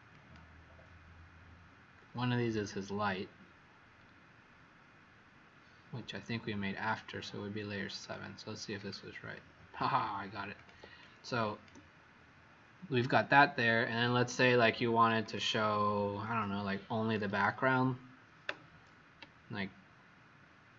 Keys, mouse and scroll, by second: 10.9 click, 13.6 click, 14.3 click, 15.1 click.